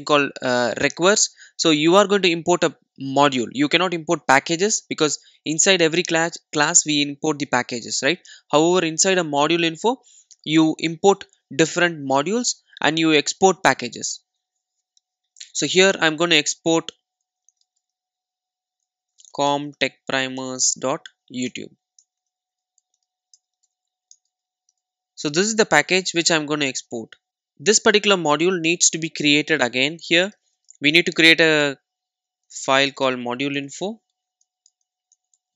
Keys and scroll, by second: 20.5 Return, 30.4 super+n.